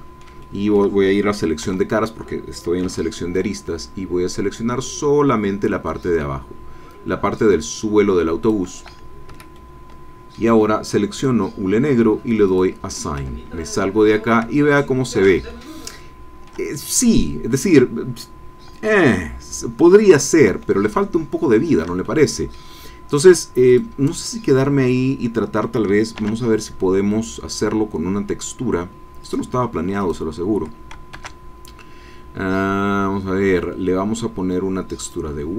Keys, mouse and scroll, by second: 1.7 3, 2.8 c, 3.3-8.6 drag, 9.3 Escape, 9.5-10.5 drag, 11.1 click, 12.4 click, 13.2 Tab, 13.9-14.3 scroll up 1, 14.6 ctrl+middle click, 15.5 ctrl+shift+click, 16.2 shift+middle click, 16.9 shift+middle click, 17.0 click, 17.9-19.5 middle drag, 20.9-22.0 shift+middle drag, 22.0 shift+middle click, 22.0 shift+click, 23.7 right click, 24.1 middle click, 26.1 shift+a, 29.2 click, 30.0 click, 31.1 shift+a, 35.0 click.